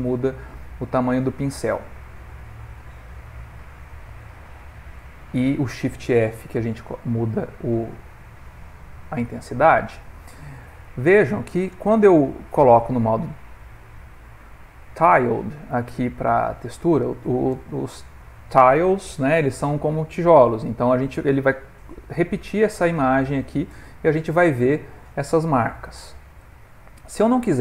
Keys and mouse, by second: 4.8 click, 6.5 shift+f, 9.9 click, 11.2 click, 13.8 middle click, 16.8 click, 20.4 middle click, 22.8 ctrl+middle click, 23.7 middle click, 24.4 click, 25.7 middle click, 26.7 ctrl+middle click.